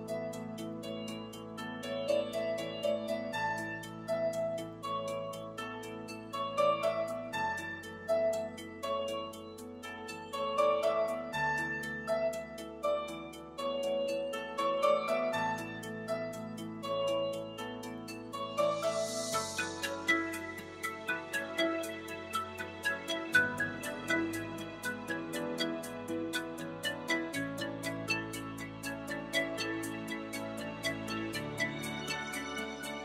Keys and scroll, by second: 0.0 shift+BackSpace, 13.0 shift+5, 13.6 shift+Home, 17.6 shift+2, 17.9 shift+Home.